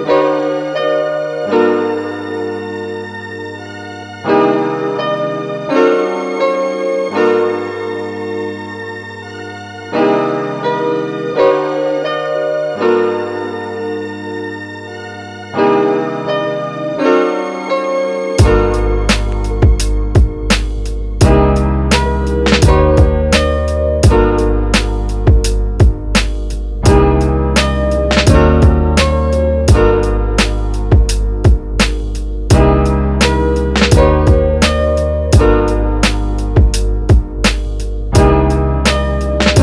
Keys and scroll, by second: 23.0 space.